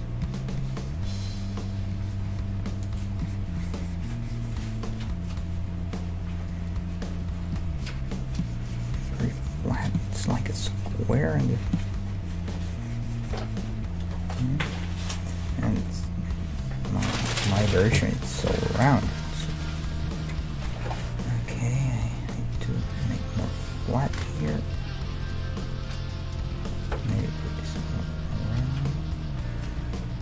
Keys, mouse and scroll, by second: 2.2-3.6 d, 4.6 d, 4.7 d, 5.5-8.8 middle drag, 7.2-13.9 typing, 7.5-14.3 drag, 11.2-13.2 middle drag, 13.9-17.6 middle drag, 16.6-21.0 right drag, 20.1 KP_3, 21.0 g, 23.8-25.5 right drag, 24.1 g, 25.6-27.8 right drag, 26.5 g, 27.9 right click, 28.7-30.2 right drag, 29.8 g.